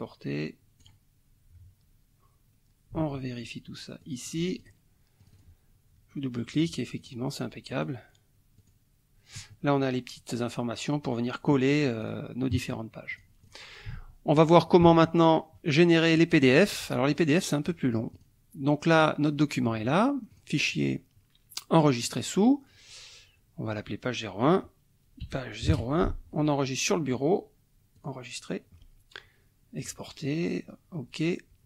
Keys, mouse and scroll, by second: 0.8 click, 3.0 alt+Tab, 4.0 alt+click, 4.6 alt+click, 5.2 click, 7.0 click, 7.7 click, 8.6 click, 12.0 click, 13.1 click, 14.9 alt+Tab, 16.4 alt+click, 17.7 click, 18.9 click, 20.3 click, 22.0 click, 25.2 p, 25.6 KP_0, 25.7 KP_1, 27.9 click, 29.7 click.